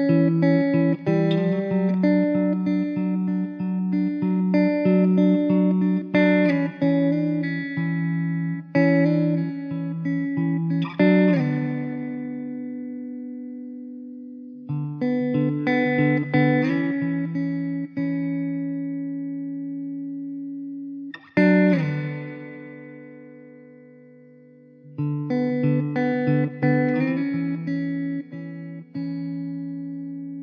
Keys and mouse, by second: 1.8 ctrl+z, 7.7 ctrl+z, 19.5 ctrl+z, 28.3 m.